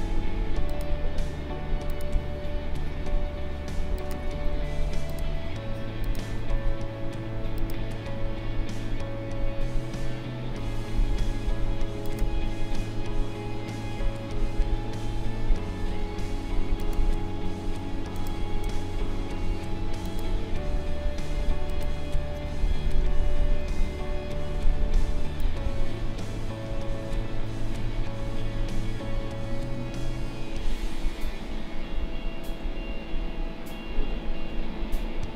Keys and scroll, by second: 23.2 ctrl+-.